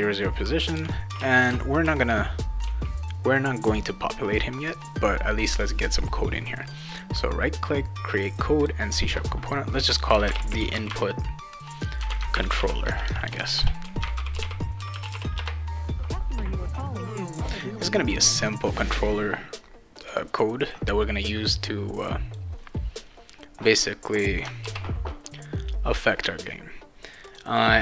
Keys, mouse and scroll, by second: 0.5-3.4 right drag, 0.5-2.6 typing, 6.6 right click, 8.6 click, 9.9-15.6 typing, 20.0 click, 21.2-22.4 drag, 24.6 ctrl+s, 27.3 click.